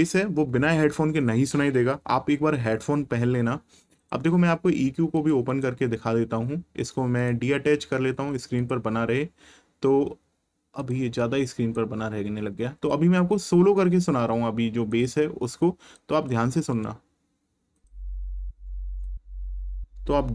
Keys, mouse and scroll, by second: 4.0 click, 7.2 click, 10.8 click, 14.9 click, 16.7 right click, 17.7 click.